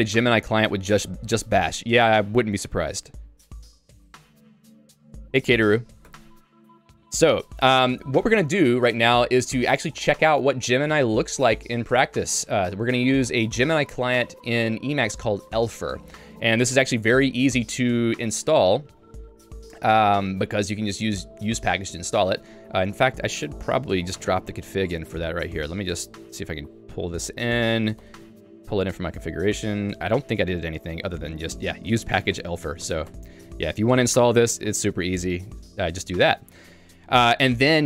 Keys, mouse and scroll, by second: 4.5 j, 5.8 k, 6.1 Tab, 6.7 j, 23.9 Escape, 24.1-27.5 typing, 25.1 Return, 26.2 Escape, 31.2 Return, 32.0 shift+v, 32.4 y, 33.1 Return, 33.8 Escape, 34.0-36.6 typing.